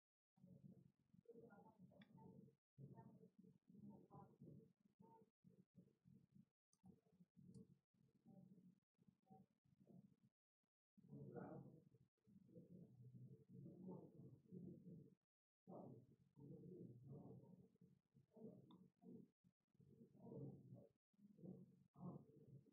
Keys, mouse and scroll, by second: 1.0 click, 1.7 click, 21.3 click.